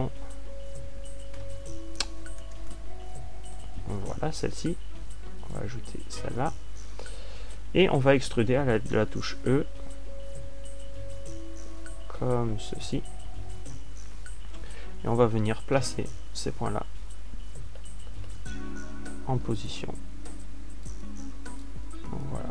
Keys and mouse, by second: 0.6 a, 10.2 e, 14.4 click, 16.8 ctrl+alt+q, 18.2 ctrl+alt+q.